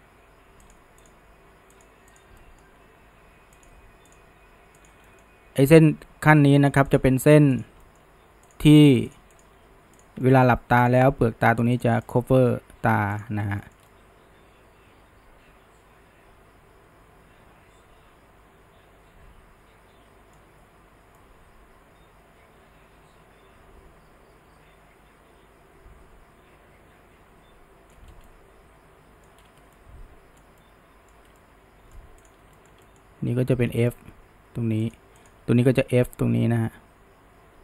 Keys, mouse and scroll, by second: 0.2 g, 1.1 click, 1.3 g, 2.2 click, 2.4-3.0 middle drag, 3.0 g, 4.1 click, 4.5 g, 5.1 middle click, 5.7 click, 6.0 g, 6.9 click, 7.1 g, 7.8 middle click, 8.5 click, 8.7 g, 9.4 click, 9.6 g, 10.2 middle click, 10.9 click, 11.3 g, 12.1 click, 12.3 g, 13.6-17.0 shift+middle drag, 21.2-24.3 shift+middle drag, 28.1 scroll, 28.3-29.4 middle drag, 29.4-29.7 scroll, 29.7-32.3 shift+middle drag, 32.3 click, 32.6-33.7 shift+middle drag, 33.7 f, 35.2 click, 35.8 f.